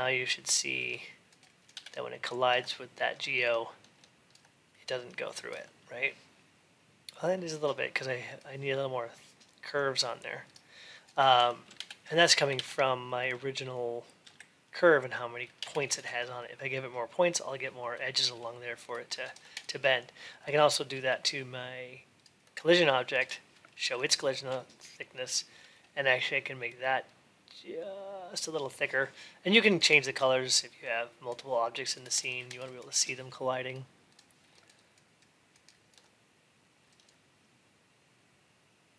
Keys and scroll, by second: 1.5 alt+x, 11.5 alt+x.